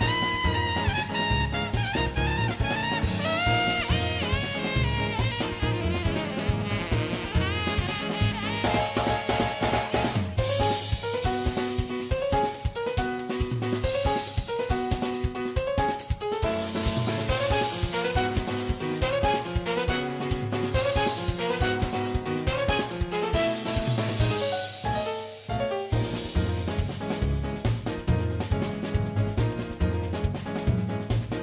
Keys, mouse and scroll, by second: 0.5 r, 0.8 g, 0.8 right click, 1.0-8.5 g, 1.1 middle click, 1.8 middle click, 3.3 middle click, 3.5 middle click, 3.6 middle click, 3.8 middle click, 4.0 middle click, 4.3 middle click, 4.8 middle click, 5.3 middle click, 5.5 middle click, 5.8 middle click, 6.1 shift+middle click, 6.5 middle click, 6.7 middle click, 7.5 click, 7.5 f, 7.7 shift+click, 8.6-11.1 drag, 11.1 middle click, 11.3 middle click, 12.9 middle click, 13.1 middle click, 13.3-16.5 typing, 13.7 middle click, 13.8 middle click, 13.9 middle click, 14.4 middle click, 14.5 middle click, 15.7 middle click, 16.0 middle click, 16.2 middle click, 16.5 middle click, 16.8 middle click, 17.5 middle click, 18.0 middle click, 18.0 f, 18.2 middle click, 18.4 g, 18.5 middle click, 18.8 middle click, 18.8 g, 19.0 middle click, 19.0 g, 21.6 middle click, 22.0 middle click, 23.3 middle click, 23.8 middle click, 24.1 Tab, 24.1 middle click, 24.2 Tab, 24.2 KP_1, 24.3 a, 24.5 g, 24.7 middle click, 25.0 middle click, 26.2 middle click, 27.6 middle click, 28.0-30.0 typing, 28.1 middle click, 28.3 middle click, 28.6 middle click, 29.0 middle click, 29.4 alt+q, 29.4 middle click, 30.0 middle click.